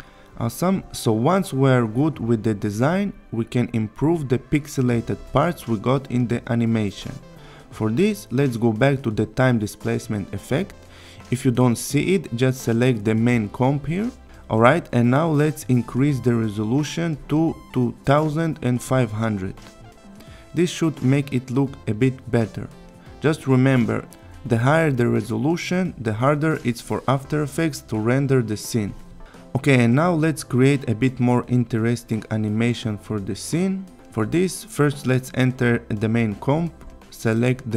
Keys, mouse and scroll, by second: 0.0 click, 6.4-7.1 click, 9.1 scroll up 1, 11.2 click, 13.5 click, 15.7 click, 16.6 Return, 19.8 click, 20.9 click, 23.5 click, 26.9-28.2 click, 28.7-29.3 click, 33.5-34.7 click, 35.5 click.